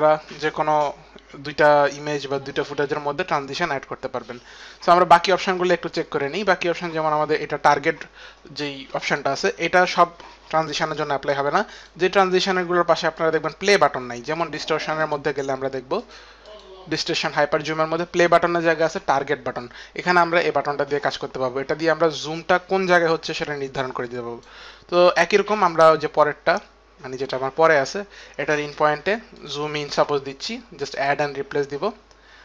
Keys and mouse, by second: 2.9 click, 11.9 click, 13.3 click, 15.3 click, 25.6 click, 29.5 click.